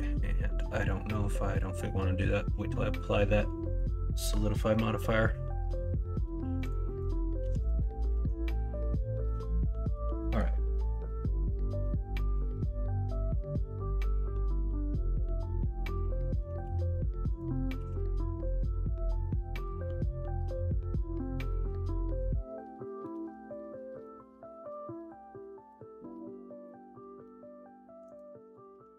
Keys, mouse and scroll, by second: 3.3 middle click, 6.8 middle click, 7.4 KP_1, 7.7 KP_3, 8.1 alt+z, 17.7 ctrl+r.